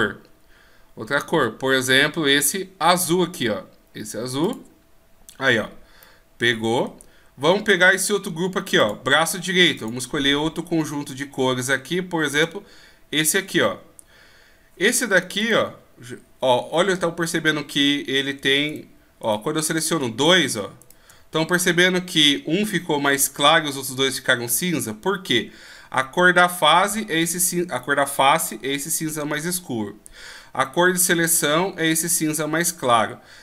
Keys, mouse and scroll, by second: 6.0 middle click, 8.8 click, 15.4 right click, 20.3 right click, 20.8 shift+right click, 22.0 shift+right click.